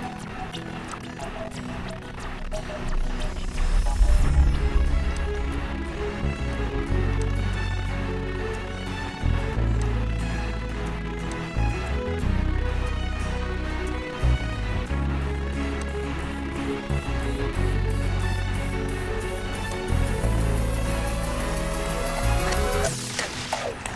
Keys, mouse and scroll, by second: 0.2 click, 1.3 click, 5.5 click, 7.5 click, 10.2 click, 13.8 click, 16.6 click, 17.5 click, 18.5 click, 19.9 click, 20.9-21.7 shift+scroll, 21.7-22.7 shift+scroll, 22.7-23.9 shift+scroll.